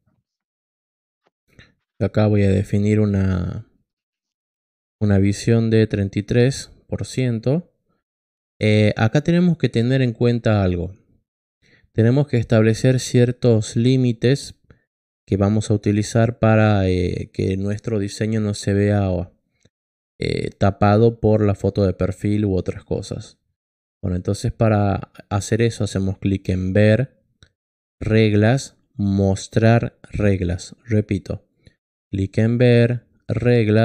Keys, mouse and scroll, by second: 1.1 click, 5.6 click, 25.3 click, 27.9 click, 31.9 click, 33.4 click.